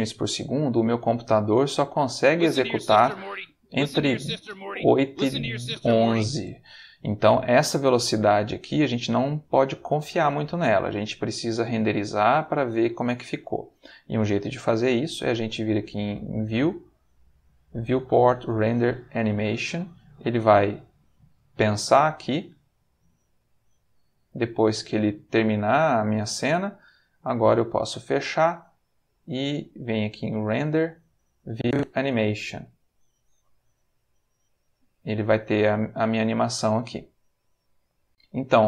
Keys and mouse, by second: 2.2 space, 10.6-11.7 shift+middle drag, 16.2 click, 19.4 click, 27.7 click, 28.9 click, 29.8 click, 30.3 click, 31.4 click, 33.0 click, 38.0 click.